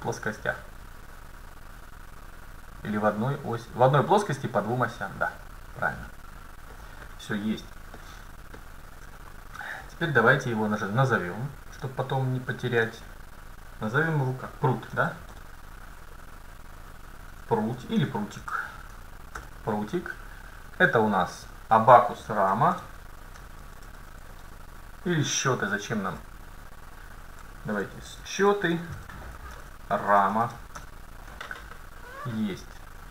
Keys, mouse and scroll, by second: 7.5 middle click, 8.0-9.5 middle drag, 10.5-11.1 scroll up 1, 11.1 middle click, 11.8-14.7 drag, 20.4-22.5 right drag, 21.4-23.3 drag.